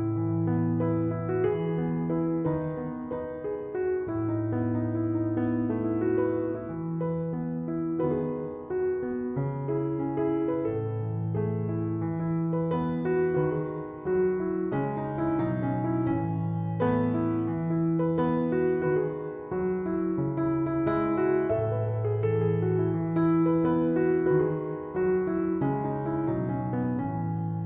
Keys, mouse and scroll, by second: 21.8 Return.